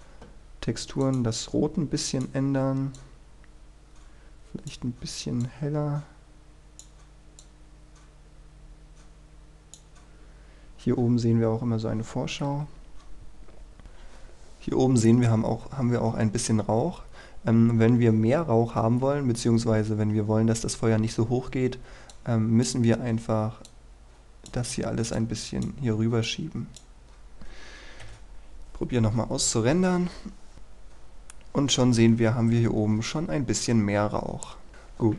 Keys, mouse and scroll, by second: 12.6 F12, 13.8-18.2 scroll up 1, 22.2-25.2 drag, 28.2 F12.